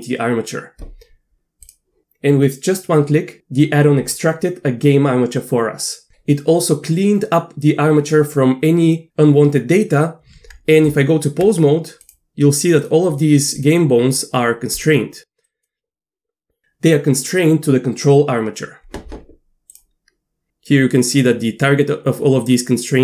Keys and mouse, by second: 10.9 Tab, 13.5 click, 14.8 click, 15.4 click, 19.7 drag.